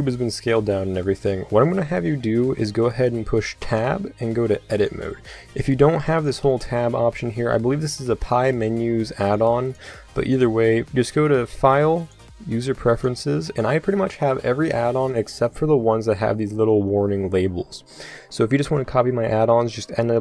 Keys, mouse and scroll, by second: 1.5-3.6 middle drag, 3.6 Tab, 6.3 Tab, 7.1 Tab, 9.2-11.5 drag, 12.0-14.1 drag.